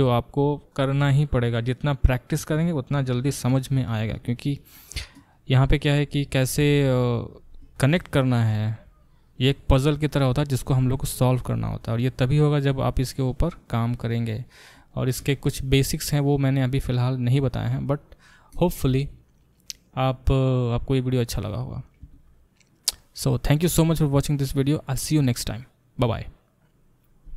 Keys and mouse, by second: 5.7 click, 5.8-27.3 middle drag, 6.0 Tab.